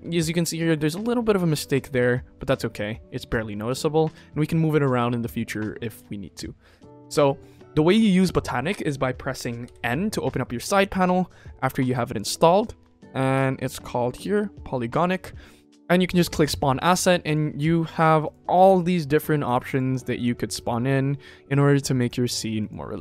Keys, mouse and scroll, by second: 9.6 n, 11.5 click, 14.1 click, 15.8 click, 16.3-18.6 drag.